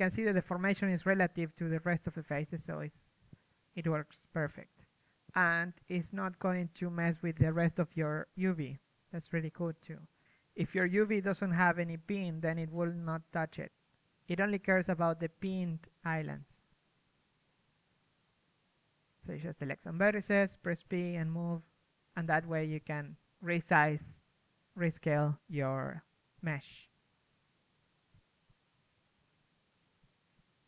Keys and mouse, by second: 1.0-2.1 drag, 2.1 a, 2.3 a, 3.4 right click, 3.5-5.3 drag, 3.5 g, 5.7-7.1 drag, 7.1 g, 8.5 right click, 8.5 g, 9.4 middle click, 9.6 right click, 9.8 g, 10.4 g, 11.0 right click, 11.9 middle click, 12.0 g, 12.3 right click, 12.9 g, 13.2 g, 14.0 click, 14.1 middle click, 14.6 g, 15.6 g, 15.9-17.6 drag, 15.9-17.0 middle drag, 15.9-17.0 right drag, 17.1-19.6 typing, 20.7 g, 21.1 middle click, 21.7 right click, 21.9 g, 22.4 middle click, 23.2 right click, 23.5-26.4 typing, 26.9 click, 27.5 right click, 27.5 g, 28.0 a, 28.1 a, 29.5 a, 30.5 p.